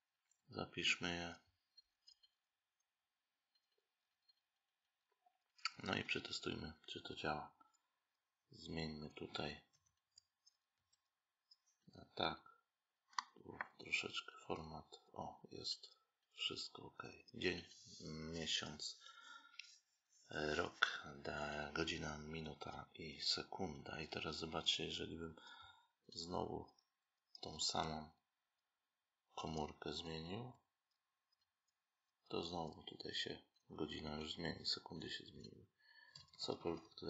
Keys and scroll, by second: 10.6 Right, 31.2 Right.